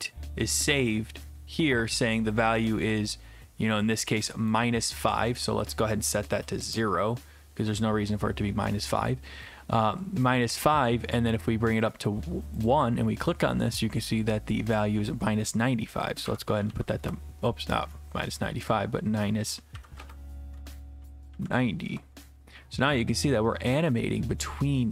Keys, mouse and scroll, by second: 4.5 click, 5.4 click, 6.2 typing, 6.7 Return, 11.8 click, 12.7 click, 14.8 click, 16.0-17.2 typing, 18.7 click, 19.7 Right, 19.9 Right, 20.0 BackSpace, 21.0 Delete, 21.1-21.9 typing, 23.9 click.